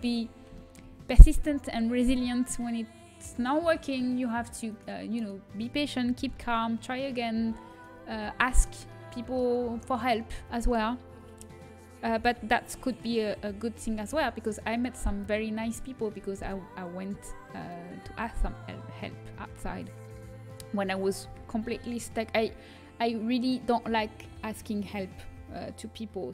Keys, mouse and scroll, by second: 0.0-2.5 middle drag, 3.3-5.1 middle drag, 5.1-6.9 right drag, 6.2 h, 6.9 middle click, 7.8-9.7 right drag, 11.2 right click, 14.6 h.